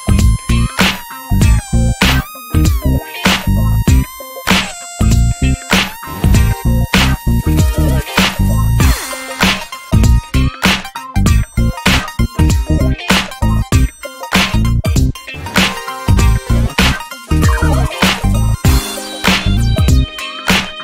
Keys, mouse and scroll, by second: 0.9 Tab, 1.0 scroll down 3, 1.1 drag, 1.3-1.7 middle drag, 1.7 ctrl+s, 1.9 click, 2.3 alt+middle click, 2.6 ctrl+s, 2.9 click, 3.2 Tab, 3.5 alt+z, 3.6-4.6 scroll up 3, 3.8 shift+middle click, 4.2 ctrl+s, 4.6 shift+middle click, 4.8 click, 5.3 click, 5.7 ctrl+z, 5.9 click, 7.0 click, 8.3 click, 8.6 alt+z, 8.7 Tab, 8.9 scroll down 7, 9.2 ctrl+s, 9.5 shift+middle click, 9.7 click, 9.8 Tab, 10.2 alt+z, 10.3 click, 10.4 scroll down 2, 10.6 shift+middle click, 11.0 ctrl+s, 11.3-12.3 shift+middle drag, 12.3 e, 13.5-14.8 drag, 14.8 shift+middle drag, 14.9 shift+scroll up 1, 15.1 alt+z, 15.6 Tab, 15.9 alt+z, 16.0-16.6 scroll up 5, 16.2 shift+middle drag, 16.6 ctrl+s, 17.0 Tab, 17.2 click, 18.5 click, 19.6 scroll up 3, 19.8 shift+middle click, 20.7 click.